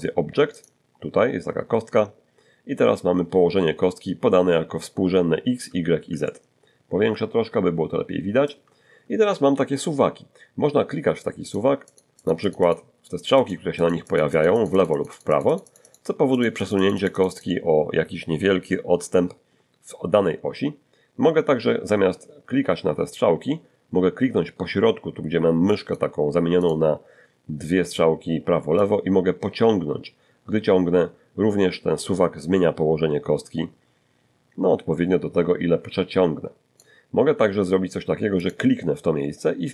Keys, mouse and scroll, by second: 0.5 click, 6.2-8.6 ctrl+middle drag, 11.4 click, 11.9 click, 13.4 click, 13.8-16.1 drag, 16.3-17.6 drag, 25.7 click, 26.6 click, 28.8-36.9 drag, 36.9-38.2 middle drag, 38.2 click.